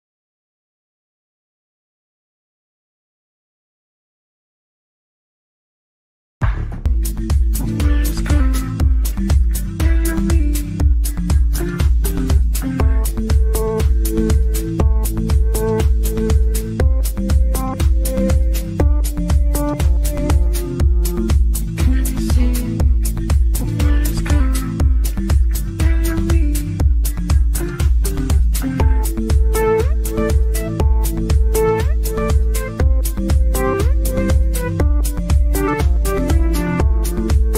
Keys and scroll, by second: 0.6 Delete.